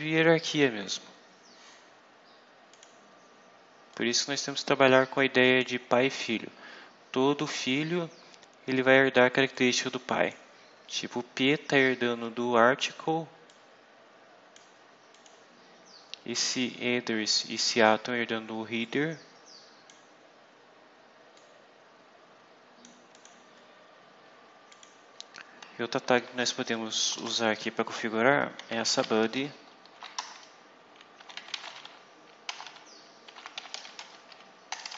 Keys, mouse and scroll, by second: 2.6 click, 3.8-5.7 drag, 6.9 scroll down 2, 9.4 click, 10.5 scroll up 2, 13.4-14.6 drag, 15.0 click, 18.7-20.0 drag, 21.2-22.9 drag, 23.0 click, 24.6 click, 26.9 Return, 27.2 Up, 28.2-29.6 typing, 30.1 shift+Return, 30.8-34.9 typing.